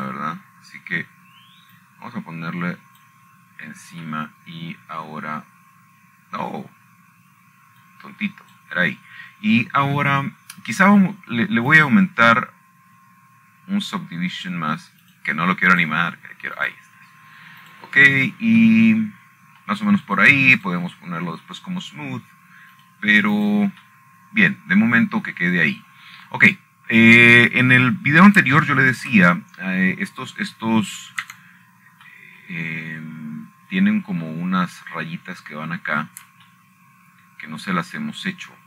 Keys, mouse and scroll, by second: 0.0 click, 1.8 click, 2.7 click, 4.5-5.8 drag, 9.2-10.2 middle drag, 10.5-11.3 drag, 14.4 click, 17.8 click, 18.4 click, 19.3 click, 20.4 click, 22.7 middle click, 22.8 right click, 23.3 click, 23.3 right click, 25.6 right click, 26.1-27.2 drag, 28.7 middle click, 29.2-29.6 scroll up 1, 31.3-32.8 shift+middle drag, 37.0 middle click.